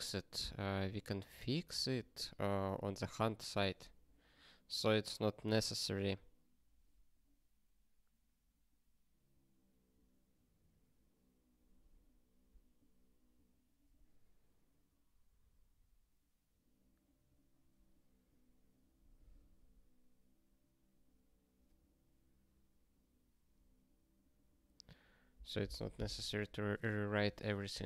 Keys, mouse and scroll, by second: 4.3 scroll down 1, 5.4 scroll down 1, 13.5 scroll down 1, 14.5 scroll down 1, 17.0 scroll down 1, 18.9 scroll down 1, 21.4 scroll down 1, 24.0 scroll down 1.